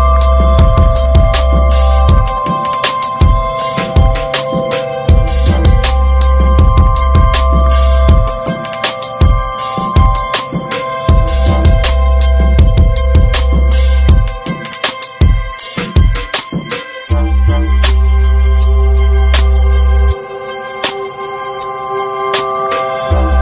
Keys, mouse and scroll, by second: 1.3 ctrl+s, 1.4-6.4 ctrl+middle drag, 6.4 ctrl+s, 7.3-9.5 drag, 9.5 scroll down 2, 10.2 middle drag, 10.4-11.2 scroll up 4, 10.6 ctrl+s, 10.8 shift+middle click, 11.2 click, 11.4 shift+a, 14.9-15.9 alt+middle drag, 15.9 r, 19.1 click, 19.9 KP_0, 22.2-23.4 drag.